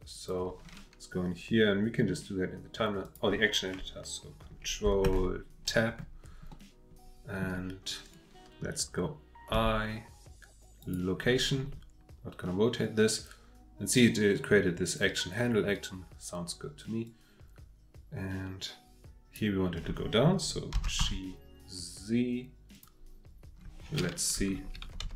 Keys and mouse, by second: 3.1 click, 5.0 ctrl+Tab, 6.5-7.4 drag, 9.5 i, 17.0-19.4 drag, 20.7 g, 21.0 z, 22.7 drag, 24.5 Left, 24.8-25.1 Left.